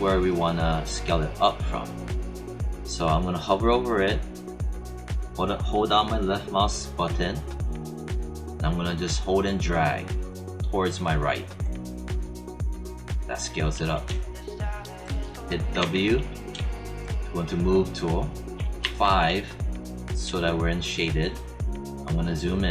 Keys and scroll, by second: 15.7 w, 18.8 5.